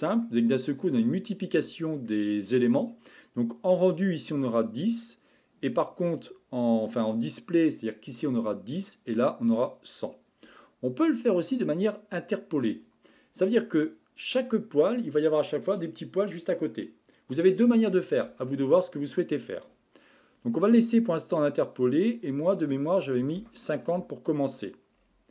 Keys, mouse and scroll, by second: 0.2-3.3 middle drag, 12.8 click, 13.6-16.7 middle drag, 21.9-24.9 drag, 24.9-25.3 scroll up 7.